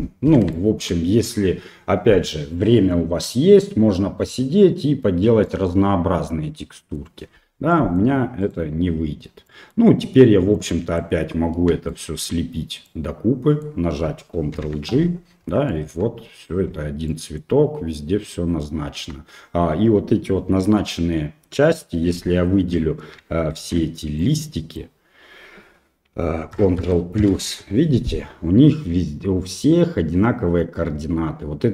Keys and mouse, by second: 0.7 shift+middle click, 5.6-7.0 middle drag, 7.7 middle click, 8.4 right click, 9.5 middle click, 10.7 click, 11.9 shift+right click, 12.9 middle click, 14.6 ctrl+j, 15.8 middle click, 16.0 Tab, 16.7 Tab, 17.1 middle click, 18.4 middle click, 19.0 Tab, 22.2 KP_1, 23.6 shift+z, 24.3 click, 26.6 ctrl+KP_Add, 26.8 ctrl+KP_Add, 27.2 ctrl+KP_Add.